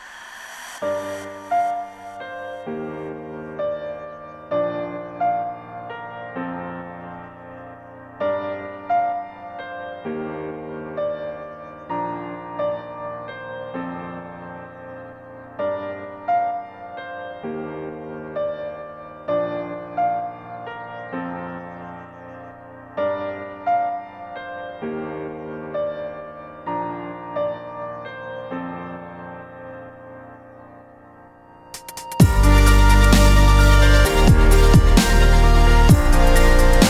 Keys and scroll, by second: 9.5 Return, 10.9 F6, 15.6 ctrl+shift+n, 18.2 KP_4, 19.5 Return, 19.7 Return, 20.3 Caps_Lock, 21.5 Tab, 21.9 Tab, 22.6 KP_1, 22.9 Return, 23.6 Tab.